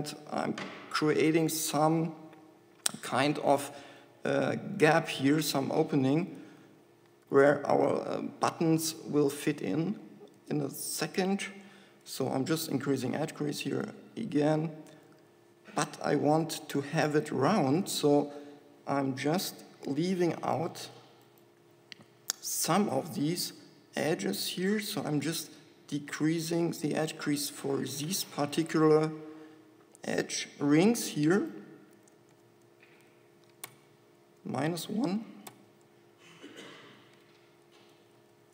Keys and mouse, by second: 3.7-5.6 drag, 5.6-7.5 middle drag, 7.5 ctrl+KP_Add, 12.9 shift+e, 18.4 a, 21.0 a, 22.2 a, 26.2 middle click, 31.3-32.7 middle drag, 32.7 shift+e.